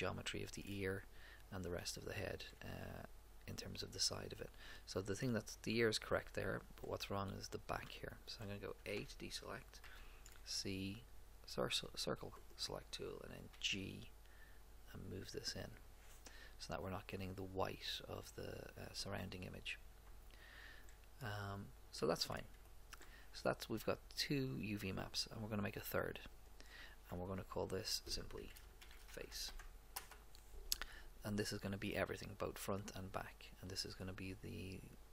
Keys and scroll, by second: 8.9 a, 9.8 c, 13.5 g, 28.6-30.0 typing.